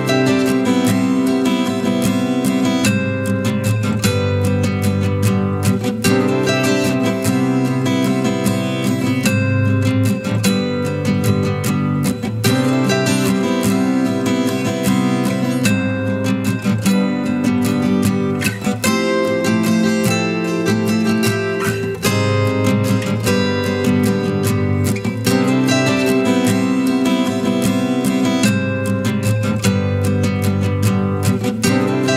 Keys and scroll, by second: 3.1 shift+Delete, 13.4 ctrl+t, 24.7 ctrl+t.